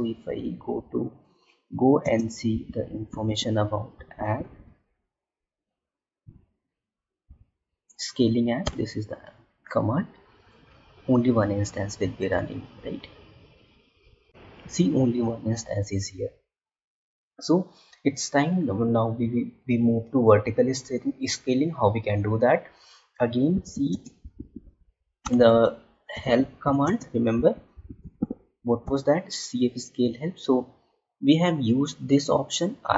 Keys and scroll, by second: 2.0 space, 6.2 Up, 23.8 space, 26.8 space.